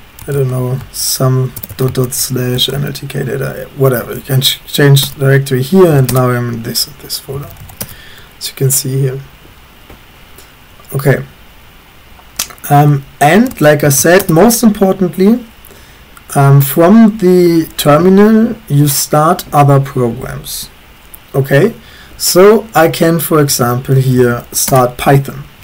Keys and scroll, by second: 0.0-2.5 typing, 2.7 Tab, 5.1 Return, 5.7-8.1 typing, 12.5-15.3 typing, 23.3-24.9 typing.